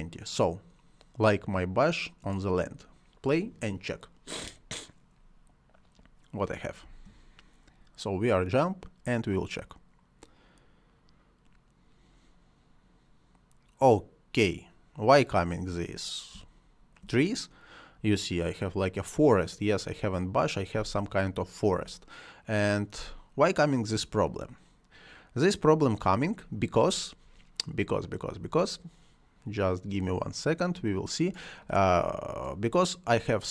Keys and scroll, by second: 6.8 space, 16.2 space, 20.6 space, 22.9 space.